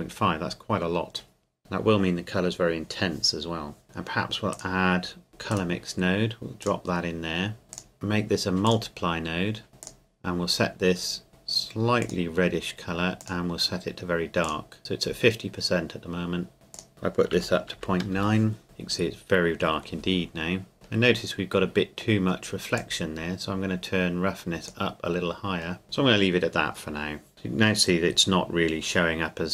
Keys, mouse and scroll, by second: 1.6 KP_Enter, 4.5 click, 5.5 click, 8.9 click, 9.7 middle click, 10.5 click, 12.0 click, 16.9 click, 17.8 KP_Decimal, 18.2 KP_9, 18.3 KP_Enter, 20.8 middle click, 22.8 click.